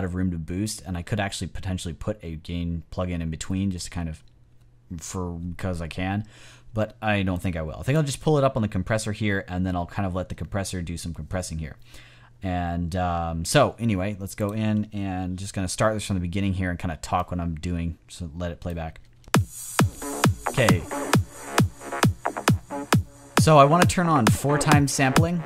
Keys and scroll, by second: 15.3 Return, 19.1 space.